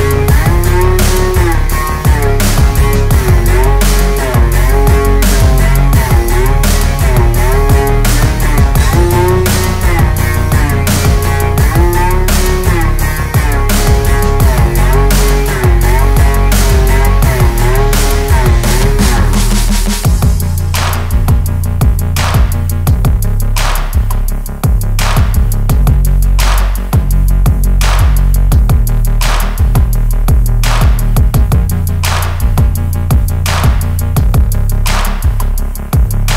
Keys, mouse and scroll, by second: 1.1-2.4 typing, 1.1 click, 3.0-4.9 drag, 4.9 typing, 5.3 click, 7.6-9.4 typing, 8.0 click, 10.0 click, 10.9-11.5 typing, 11.8-15.8 drag, 16.7-17.0 typing, 17.2 click, 18.9 space, 19.0 click, 19.3 space, 20.0 click, 20.8 space, 20.9 click, 21.2 space, 22.2 alt+scroll down 1, 24.1 alt+scroll up 1, 24.8-29.3 typing, 26.2 click, 27.4 click, 29.4 click, 31.4 typing, 31.7 click, 33.1-33.5 alt+scroll down 1, 34.4 alt+scroll up 1, 34.6 Return.